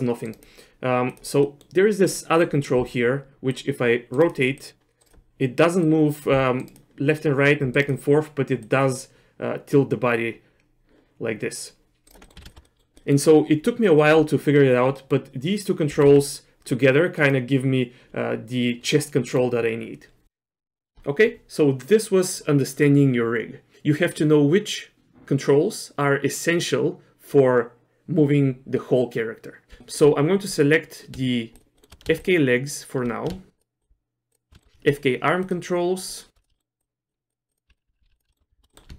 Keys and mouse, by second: 1.5 middle click, 2.2 middle click, 3.5 click, 4.6 click, 5.8 click, 7.2 click, 8.6-12.1 drag, 12.2 middle click, 12.4 ctrl+z, 12.6 middle click, 12.9 middle click, 15.0 middle click, 15.9 r, 18.9 middle click, 20.8 middle click, 20.9 shift+middle click, 29.8 shift+middle click, 31.8 shift+middle click, 32.2 shift+click, 33.6 shift+click, 34.6 shift+middle click, 34.9 shift+click, 36.1 shift+click, 36.5 shift+middle click, 36.8 shift+click, 37.5 shift+click, 38.2 ctrl+z, 38.2 ctrl+click, 38.3 shift+middle click, 38.7 middle click.